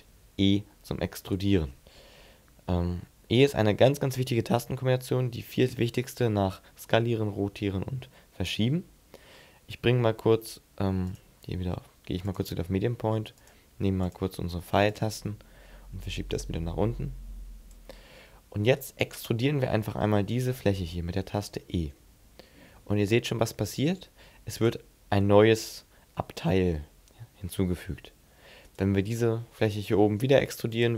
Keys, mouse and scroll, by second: 1.0 right click, 10.9 click, 13.2 click, 13.9 click, 14.7 click, 15.8 click, 18.4 right click, 20.0 shift+middle click, 20.6 middle click, 21.7 e, 24.4 click, 28.5 right click, 29.4 right click, 29.9 e, 30.6 click.